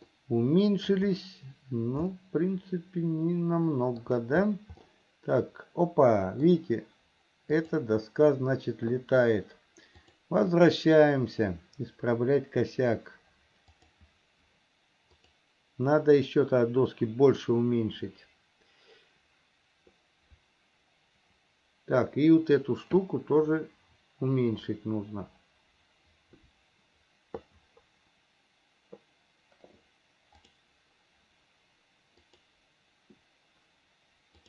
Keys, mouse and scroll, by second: 0.4 middle click, 2.4-4.4 shift+middle drag, 5.2-6.8 middle drag, 7.7 click, 10.3-34.4 drag.